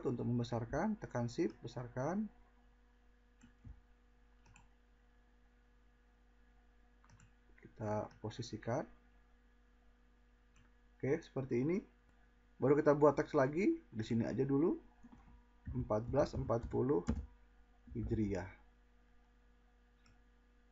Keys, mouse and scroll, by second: 8.2 click.